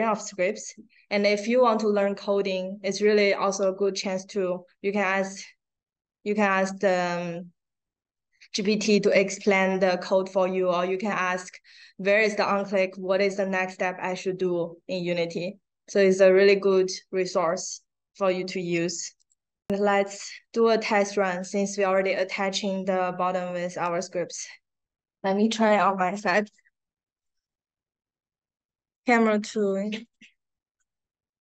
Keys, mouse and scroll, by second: 2.3-2.6 scroll down 2, 4.0-4.4 scroll down 4, 4.2 click, 7.0 scroll down 2, 7.8-8.1 scroll up 2, 10.4 scroll up 2, 13.0 scroll down 2, 16.2 click, 16.4 click, 17.0 click, 17.6 click, 17.9 click, 19.1 click, 19.9 click, 28.9 click, 30.0 click.